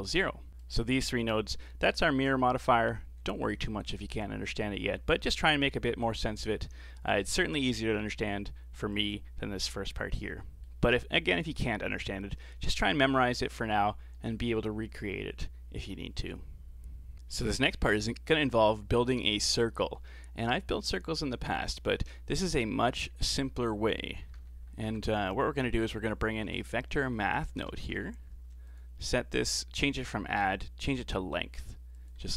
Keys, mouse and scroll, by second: 0.5 click, 0.6 click, 7.2-7.6 scroll down 11, 7.8-9.0 middle drag, 9.0 click, 10.0-10.3 scroll up 4, 10.3-10.9 middle drag, 10.9-11.5 scroll up 4, 11.5-12.9 middle drag, 12.9 click, 13.8-14.2 scroll up 4, 14.2-17.1 middle drag, 17.1 scroll down 3, 17.3-19.5 middle drag, 19.5-19.8 scroll down 4, 19.8-20.9 middle drag, 20.9 click, 21.9 scroll up 4, 22.1 middle click, 23.1 shift+a, 27.3 Down, 27.4 Down, 29.9-32.3 drag.